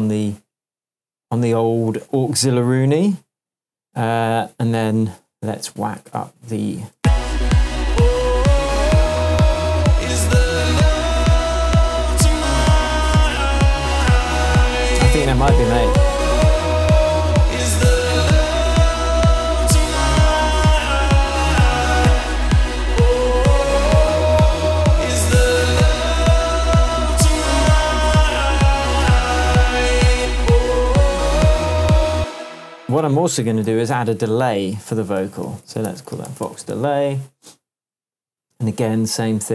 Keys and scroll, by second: 5.2 Tab, 6.9 space, 10.2 Tab, 32.1 space, 33.6 alt+super+t, 34.9 alt+super+r, 35.4-36.7 typing, 37.4 Return.